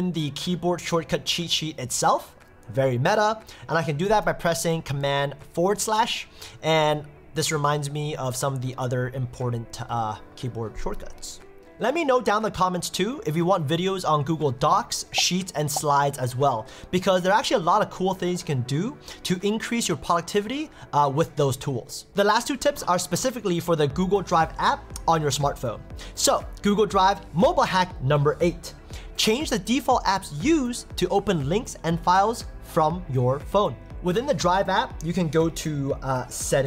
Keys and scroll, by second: 5.4 super+/.